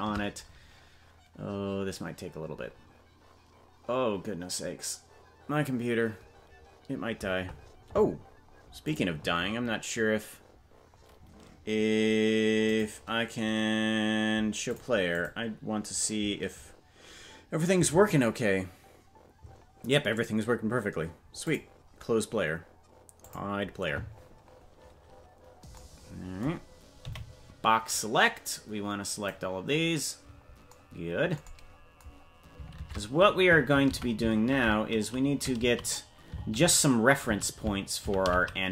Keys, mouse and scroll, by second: 25.3-25.8 scroll down 2, 27.0 b, 32.7 shift+`.